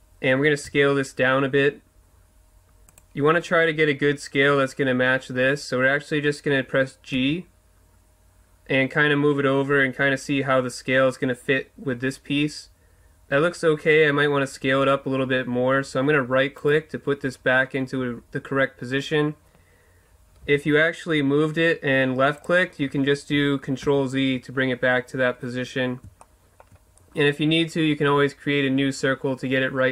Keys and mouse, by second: 0.7 s, 3.0-7.1 drag, 7.1 g, 16.7-18.6 middle drag, 20.4 g, 22.4-24.3 drag, 23.9 ctrl+z, 26.2 middle click, 27.0-28.6 drag.